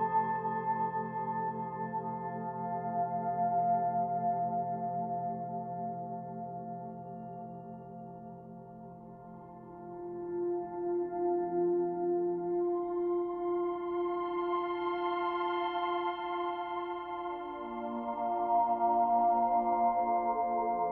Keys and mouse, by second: 0.1 click, 0.6 click, 1.2 drag, 1.7 click, 2.4 click, 4.1 click, 4.5 click, 5.2 click, 5.8 drag, 7.1 click, 8.1 drag, 11.4 click, 12.7-13.9 typing, 15.2 click, 16.2 click, 17.6-20.9 drag.